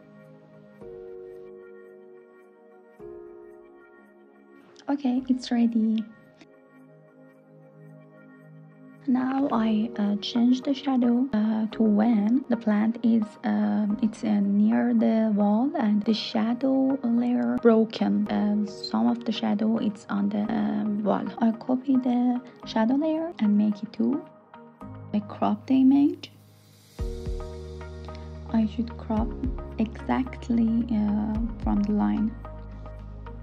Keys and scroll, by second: 18.3 super+c, 19.6 shift+super+v, 30.6 Return.